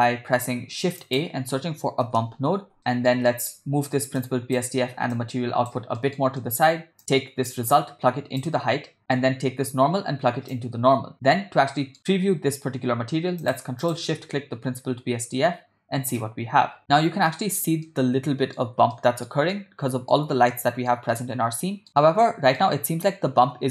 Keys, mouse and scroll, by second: 1.0 shift+a, 2.8 middle click, 3.3 ctrl+middle click, 4.2-4.6 drag, 5.2 click, 6.0 middle click, 6.4 ctrl+middle click, 7.5-8.5 drag, 9.0 ctrl+middle click, 10.5 click, 11.1 middle click, 13.6 click, 14.1 ctrl+shift+click, 17.4 shift+middle click, 17.9-18.6 ctrl+middle drag, 19.0-19.3 shift+middle drag, 19.6-20.2 ctrl+middle drag, 20.6-21.0 shift+middle drag, 21.2-21.9 middle drag, 22.0-22.7 middle drag.